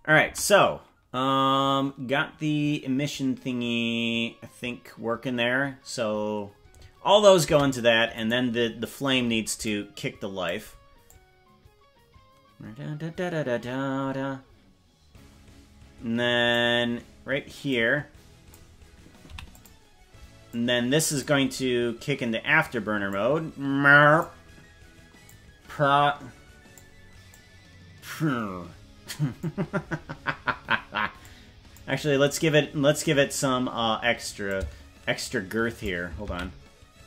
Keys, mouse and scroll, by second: 0.3 space, 7.5 space, 8.3 right click, 9.6 click, 11.0-16.5 drag, 17.6 click, 19.3 i, 20.5 click, 21.5-21.9 scroll down 3, 23.1-24.2 drag, 25.2-26.9 drag, 27.3-29.5 drag, 31.2 click, 34.4-35.8 shift+drag, 36.5 ctrl+z.